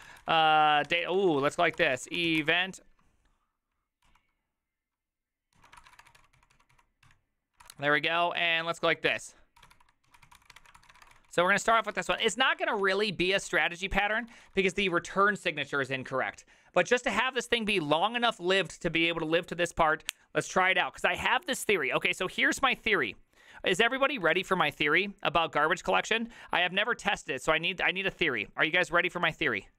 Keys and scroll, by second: 0.0-2.9 typing, 4.1 ctrl+n, 4.1 typing, 5.6 ctrl+y, 5.7-15.2 typing.